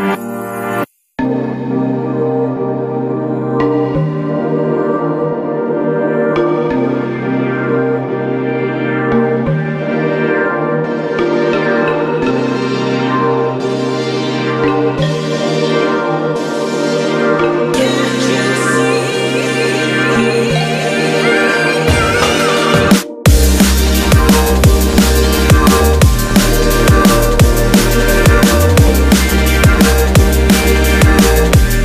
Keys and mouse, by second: 1.2 shift+click, 2.0-5.8 ctrl+middle drag, 5.8 e, 11.2 e, 18.8 click, 19.6-22.6 middle drag, 22.6 Tab, 23.8-25.4 ctrl+middle drag, 25.4 click, 26.4-29.5 right drag, 29.5-31.7 ctrl+middle drag, 31.7 Tab.